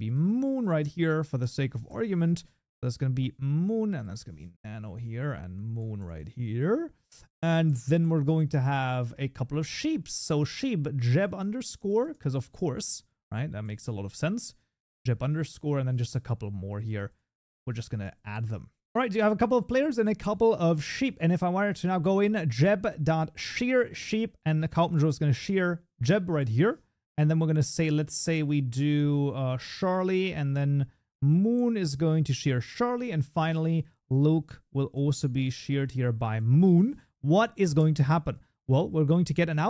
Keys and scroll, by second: 6.0 ctrl+BackSpace, 10.4 Tab, 15.7 ctrl+d, 18.9 ctrl+s, 22.1 Tab, 25.0 ctrl+s, 26.5 ctrl+d, 29.4 Tab, 36.7 ctrl+s.